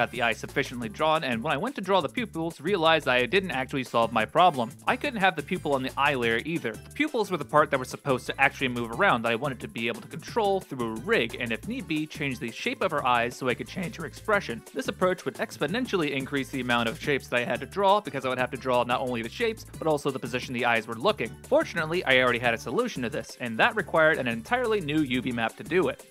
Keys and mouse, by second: 0.0 ctrl+space, 2.4 alt+h, 2.7 middle click, 3.6 middle click, 5.6 middle click, 6.3 Tab, 7.0-8.2 right drag, 8.2 l, 8.9 x, 10.0 l, 10.5 q, 12.3-13.5 middle drag, 14.5 middle click, 15.0 r, 17.4-19.7 middle drag, 21.5-26.1 drag.